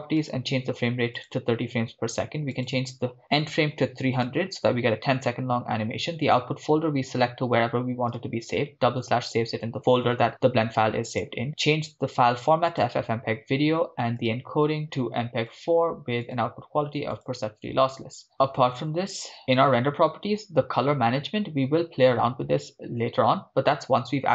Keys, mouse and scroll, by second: 1.4 click, 3.7 click, 3.7 0, 5.3-6.2 scroll down 2, 6.2 scroll down 1, 6.3-8.2 drag, 7.2 /, 8.9-9.2 scroll down 2, 11.1-12.9 drag, 13.4 scroll down 2, 14.2 click, 14.4-14.8 scroll down 2, 14.8-15.6 drag, 16.2-17.3 drag, 17.8-18.3 scroll down 4, 18.3-19.6 scroll up 5, 19.6 scroll up 1, 19.6 drag, 20.0 scroll down 2, 20.8-21.1 scroll down 1, 21.2 click, 21.5-22.3 scroll down 2, 22.3-22.6 scroll down 1.